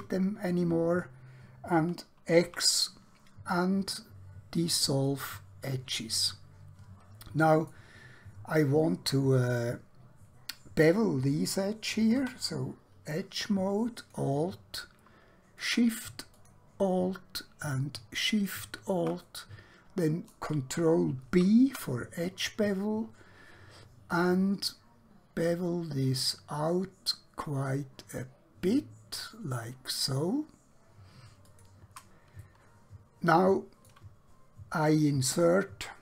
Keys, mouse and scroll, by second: 2.6 x, 5.1 click, 6.3 middle click, 12.1 2, 13.9 alt+click, 16.4 alt+shift+click, 19.3 middle click, 21.4 ctrl+b, 31.5 click, 32.5 middle click.